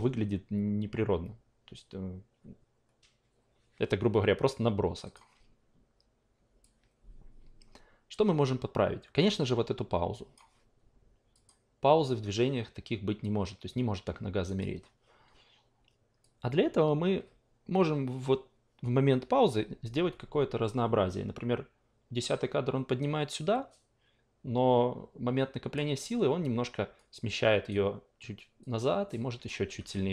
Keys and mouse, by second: 5.0 click, 6.6-10.3 drag, 11.3 click, 14.4 click, 16.2-25.7 drag, 27.7 click, 29.4-30.1 drag.